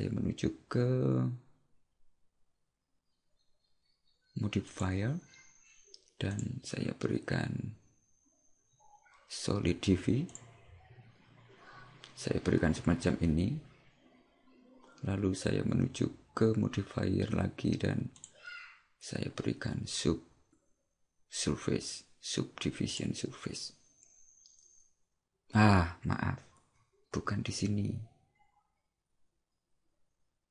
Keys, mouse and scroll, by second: 4.7 click, 6.4 click, 18.3 click, 27.2 ctrl+z.